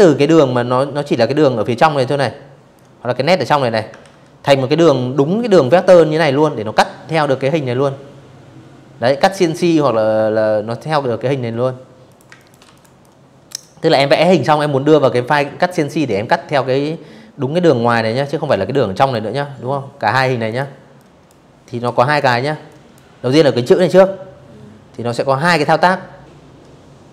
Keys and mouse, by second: 0.4 click, 1.7 ctrl+z, 9.7 click, 9.9 space, 10.0 click, 10.3 v, 10.4 click, 10.7 click, 16.1 click, 18.2 click, 18.6 click, 19.8 click, 20.4 click, 26.6 ctrl+shift+o.